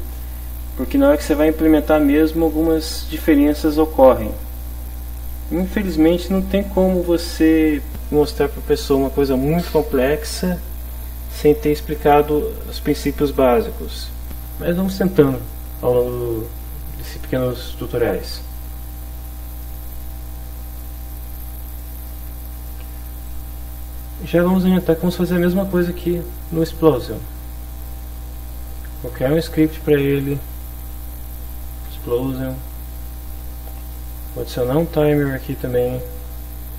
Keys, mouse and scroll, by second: 20.7 click, 21.7 click, 23.3 click, 25.4 click, 29.4 click, 30.2 click, 32.5 click, 34.0 click, 34.6 click, 35.6 click.